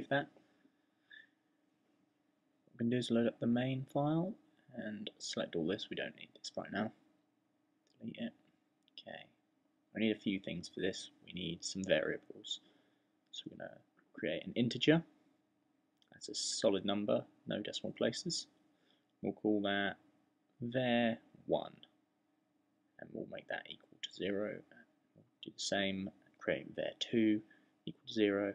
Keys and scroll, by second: 11.9 fn+Delete, 12.9-13.8 typing, 18.1-28.5 typing.